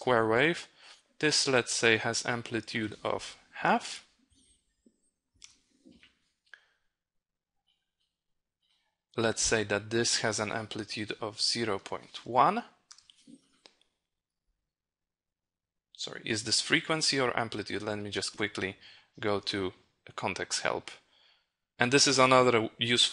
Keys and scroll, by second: 18.7 ctrl+h.